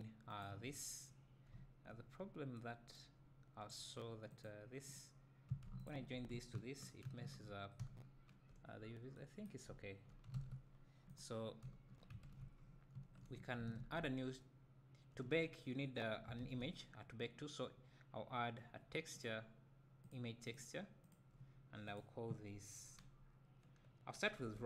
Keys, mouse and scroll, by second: 0.5 shift+click, 2.3-2.6 scroll up 1, 4.5 click, 5.0 click, 5.9 shift+click, 7.1 ctrl+j, 7.4 ctrl+j, 7.9 `, 8.9 scroll up 1, 9.7 `, 10.4 alt+a, 10.7 scroll down 2, 11.2 click, 11.7 `.